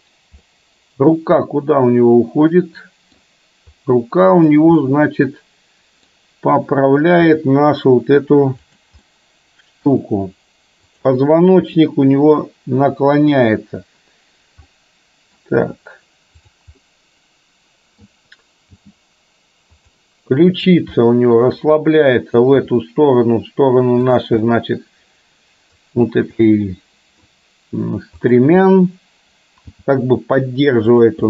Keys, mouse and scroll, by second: 0.5-3.2 middle drag, 4.4-4.7 drag, 4.9-6.1 middle drag, 7.4 g, 9.1-9.9 middle drag, 10.9 click, 11.7 r, 14.9 middle click, 16.9-18.1 middle drag, 18.7 g, 20.7 click, 21.1 middle click, 22.6 r, 24.5-25.9 middle drag, 26.5-28.0 middle drag, 28.4 click, 29.9 g.